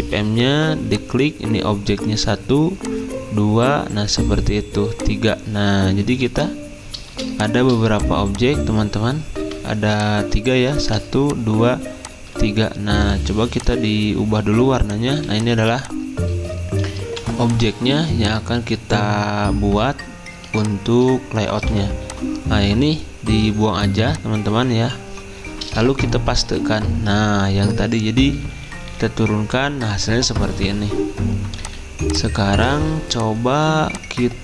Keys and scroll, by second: 9.4 Delete, 10.5 ctrl+z, 15.1 typing, 17.3-17.8 typing, 20.5 space, 21.6 v, 23.8 Delete, 24.5 typing, 26.5 ctrl+f, 28.3 ctrl+[, 28.3 ctrl+Right, 31.6 z, 32.7 ctrl+z.